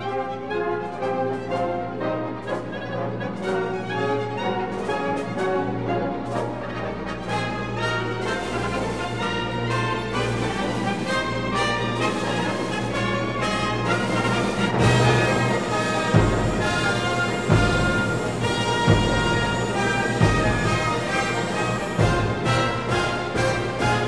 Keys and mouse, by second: 0.8 f, 7.8 i, 8.9 click, 9.1 Tab, 12.8 click, 15.9 Tab, 20.1 alt+click, 21.1 f, 22.6 i.